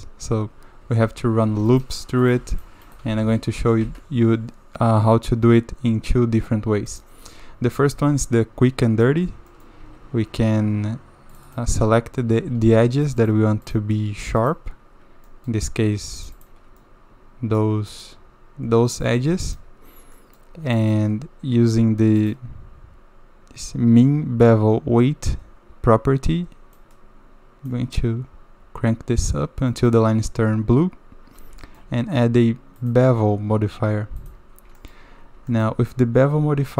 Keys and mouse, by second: 0.8 Tab, 1.6 ctrl+r, 2.4 ctrl+r, 3.1 ctrl+z, 3.2 ctrl+z, 3.8 Tab, 7.9 Tab, 8.2 click, 9.5 click, 9.8 2, 11.3 click, 11.5 click, 13.2 shift+click, 14.4 shift+click, 15.3 drag, 16.2 shift+middle click, 16.8 middle click, 17.9 middle click, 19.0 middle click, 19.4 shift+middle click, 20.1 middle click, 20.7 shift+middle click, 22.2 click, 29.7 middle click, 31.6 shift+middle drag, 34.8 shift+middle click, 35.5 shift+click.